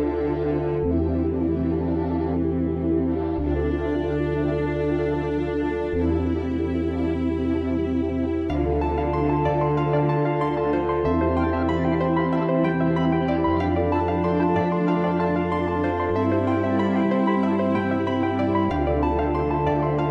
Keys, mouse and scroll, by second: 1.2 click, 3.0 click, 4.4 alt+z, 5.6 click, 7.4-7.8 scroll up 2, 7.8 shift+middle click, 8.5-11.6 scroll up 1, 12.7 click, 13.0 scroll down 2, 13.3-14.7 scroll up 1, 14.7 click, 17.8 g.